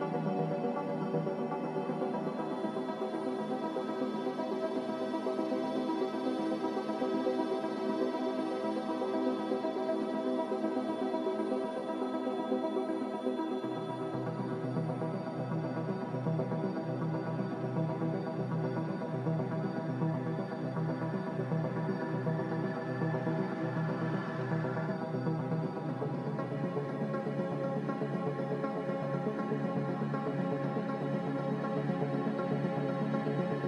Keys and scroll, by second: 1.0 g, 2.3 z, 8.7 g, 9.6 g, 16.2 z, 18.1 Delete, 26.9 c, 33.1 z.